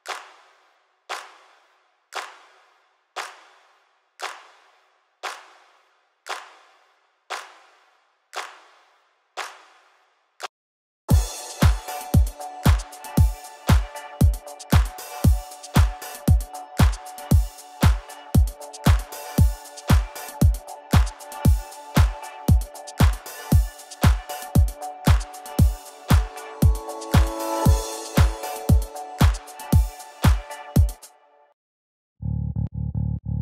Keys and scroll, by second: 31.4 s.